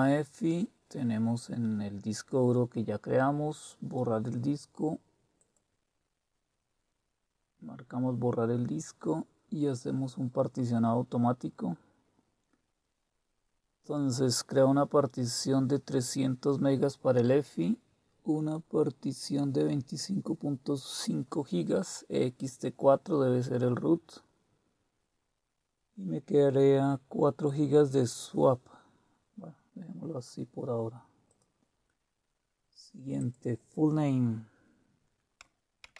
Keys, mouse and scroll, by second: 5.4 click, 31.2 click, 33.2 click, 35.6-35.9 typing.